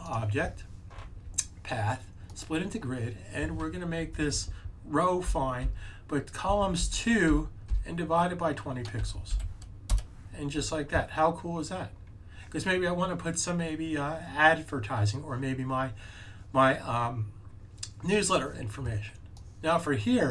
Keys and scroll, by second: 6.7 2, 8.7-9.7 typing.